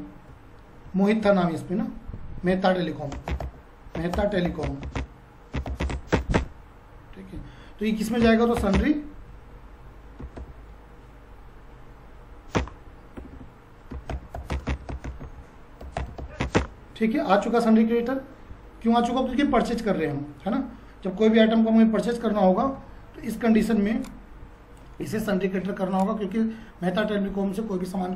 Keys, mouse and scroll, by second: 22.6 F5.